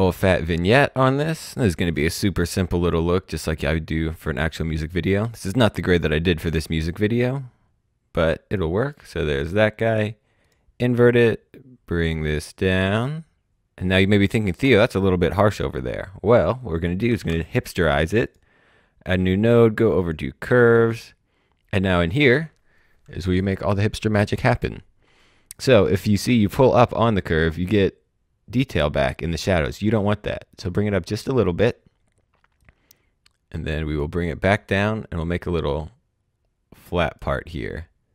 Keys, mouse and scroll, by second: 0.3 click, 4.2 click, 11.4 scroll down 1, 13.4 click, 16.7 click, 17.2 s, 18.2 click, 19.9 click, 26.1 click.